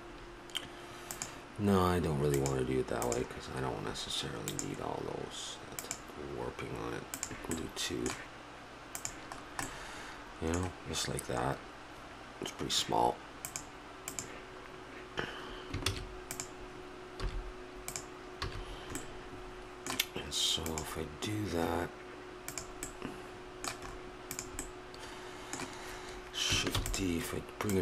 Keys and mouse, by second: 1.1-6.4 drag, 7.2-10.1 drag, 7.6-9.1 middle drag, 10.1-13.5 middle drag, 13.5-15.4 drag, 15.8 shift+s, 17.2 s, 18.4 a, 23.4 middle click, 24.3 click, 25.2 middle click, 26.0 click, 26.7 shift+d, 27.7-27.8 drag.